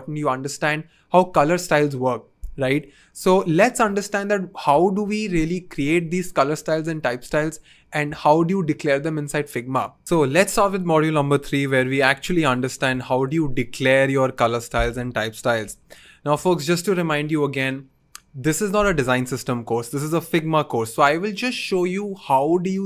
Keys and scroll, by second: 15.3-16.0 typing.